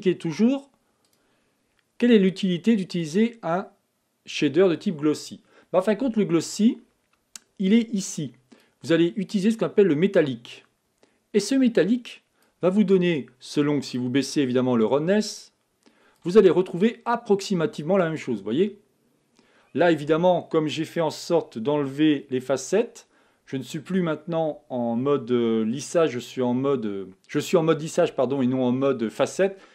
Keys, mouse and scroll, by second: 4.4 click, 8.8-11.6 drag, 14.1-16.7 drag, 16.7-18.2 middle drag, 18.2-18.8 scroll up 4.